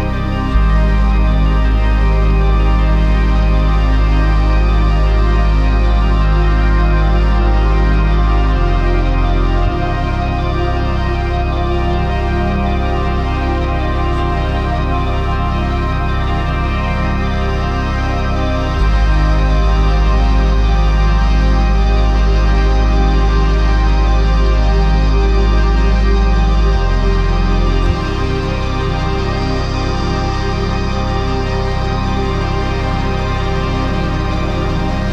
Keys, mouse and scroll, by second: 0.0 right click, 9.9 right click, 13.3 right click, 29.2 right click, 30.2 right click, 34.3 right click, 34.9 right click.